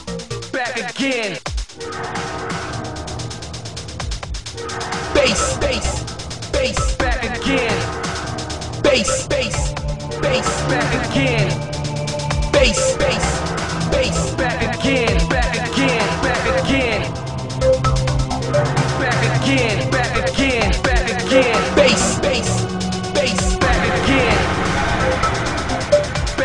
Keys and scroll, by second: 16.1 ctrl+z.